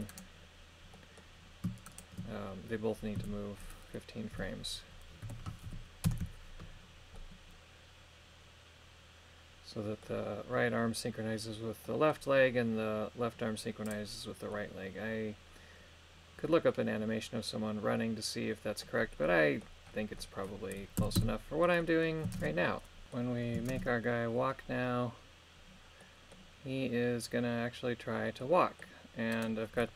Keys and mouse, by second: 1.0 middle click, 1.9 shift+right click, 3.2 a, 4.3 g, 5.2 KP_1, 5.7 KP_5, 6.1 Return, 7.2-10.1 middle drag, 11.9 middle click, 14.5-18.9 middle drag, 19.3 middle click, 20.2 middle click, 21.0 a, 21.2 a, 21.8 middle click, 22.4 shift+space, 23.0 middle click, 23.7 shift+space, 26.0 middle click, 28.4 middle click, 29.4 right click.